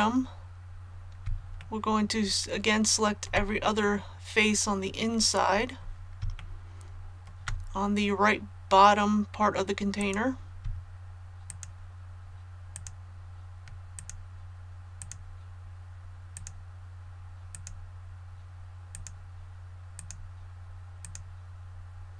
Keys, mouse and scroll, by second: 1.6-3.2 shift+middle drag, 3.8 middle click, 4.8-6.2 middle drag, 6.3 shift+middle click, 9.9 right click, 11.4 shift+right click, 12.7 shift+right click, 13.9 shift+right click, 15.0 shift+right click, 16.3 shift+right click, 17.5 shift+right click, 18.9 shift+right click, 19.9 shift+right click, 21.0 shift+right click.